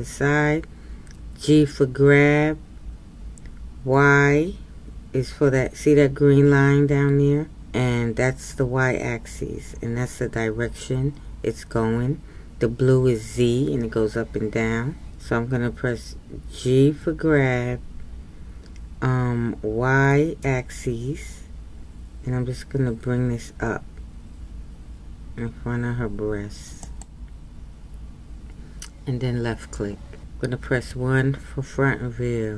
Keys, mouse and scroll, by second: 1.3 g, 30.9 KP_1.